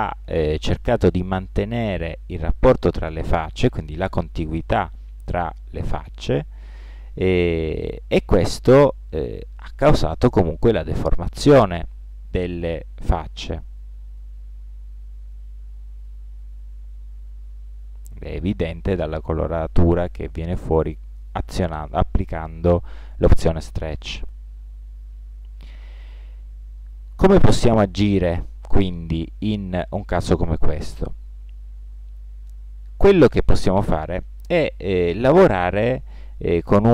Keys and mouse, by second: 34.8 middle click.